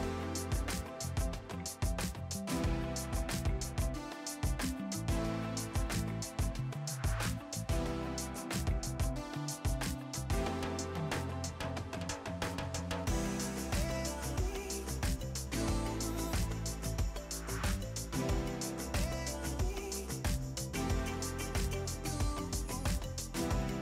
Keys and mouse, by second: 1.5 right click, 1.7 click, 2.6 right click, 5.9 click, 7.3 click, 12.9 click, 16.5 shift+click, 17.0 right click, 17.3 click, 17.4 right click, 17.7 click, 20.0 click, 21.5 s, 21.9 ctrl+click, 22.6 KP_0, 22.9 Return, 23.2 click.